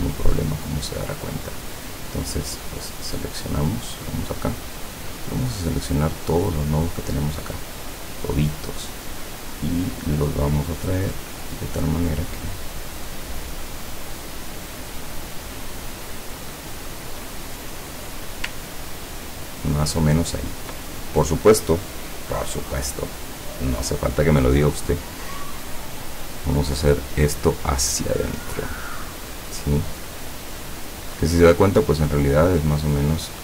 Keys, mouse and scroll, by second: 0.3 click, 1.9 click, 4.0 click, 5.6-7.1 drag, 10.6-14.4 drag, 15.2 click, 16.5 click, 16.9 click, 18.7 ctrl+scroll down 2, 19.8 ctrl+scroll up 2, 24.4 click, 26.2 click, 27.5-31.5 drag.